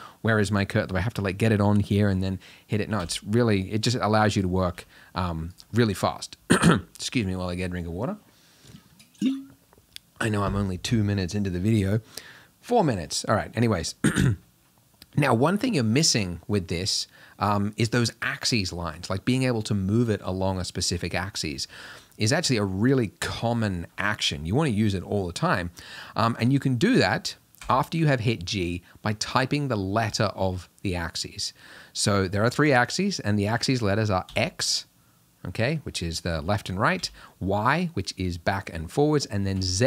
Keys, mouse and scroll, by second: 3.1 g, 4.7 g, 27.6 g.